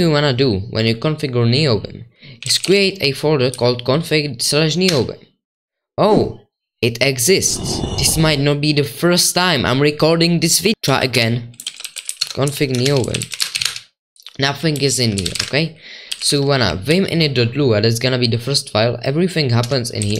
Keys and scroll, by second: 2.6-3.5 typing, 3.5 Right, 4.8 Return, 10.5-17.4 typing.